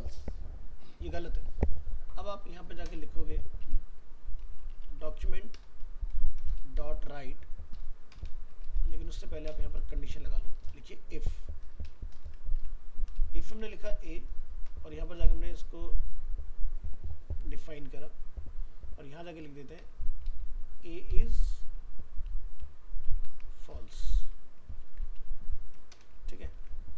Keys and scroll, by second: 21.1 ctrl+shift+Left, 24.8 ctrl+s.